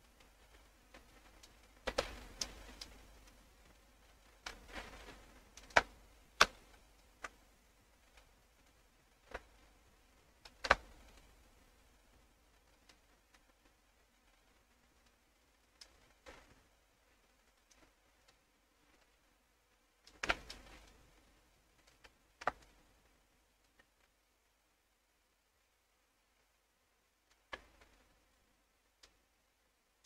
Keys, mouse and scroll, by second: 1.5 right click, 2.4 ctrl+click, 3.3-5.5 ctrl+drag, 5.4 ctrl+right click, 6.4 click, 7.6 click, 8.6 click, 9.3-10.5 ctrl+drag, 11.1 click, 11.7-12.9 drag, 13.4-15.8 drag, 16.5-17.7 drag, 17.6 right click, 18.2 click, 19.0-20.1 ctrl+drag, 20.4 click, 20.9-22.6 drag, 23.0 click, 24.1-27.3 drag, 28.1 click, 29.5 click.